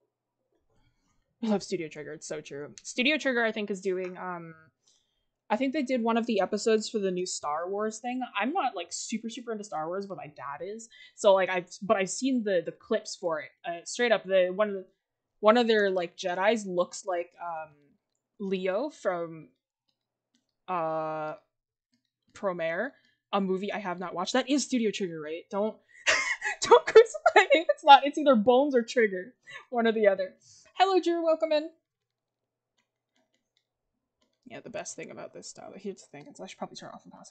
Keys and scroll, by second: 27.7 ctrl+z.